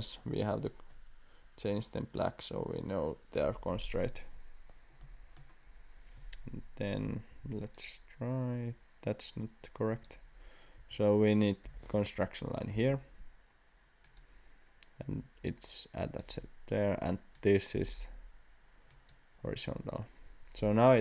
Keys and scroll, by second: 7.3 Escape, 10.8 Escape, 11.6 l, 12.7 x, 16.9 Escape.